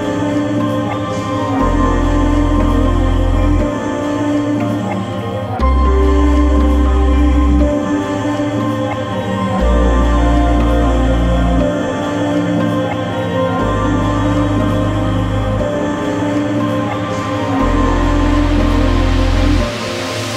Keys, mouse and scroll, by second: 0.9 click, 1.5 middle click, 2.1-8.7 drag, 8.7-10.2 right drag, 10.2-11.8 drag, 11.9-13.4 typing, 14.6 Return, 15.1 shift+], 15.3 Return, 15.9 shift+\, 16.2 Up, 16.9 Tab, 17.8-20.3 right drag.